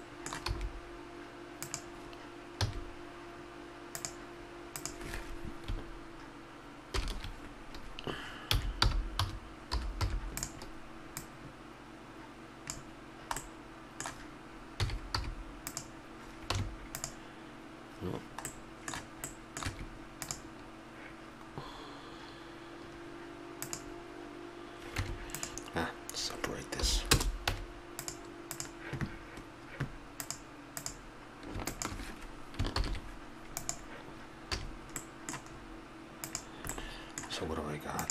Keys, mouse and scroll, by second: 0.5 e, 2.7 x, 4.8 click, 7.0 ctrl+l, 8.5 r, 11.2-12.9 drag, 13.4-15.7 middle drag, 14.8 s, 16.6 q, 18.5 middle click, 19.7 Tab, 25.0 Tab, 26.8 p, 27.5 Tab, 32.8 ctrl+l, 34.6 a, 36.2-36.8 right drag, 36.8-38.1 middle drag.